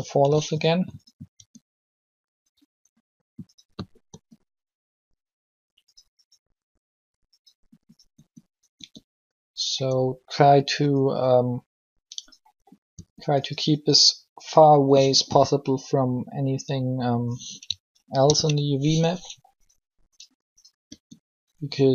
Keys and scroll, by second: 1.3 r, 4.1 r, 8.1 r, 8.8 r, 12.9 r, 17.9 ctrl+l, 20.8 r.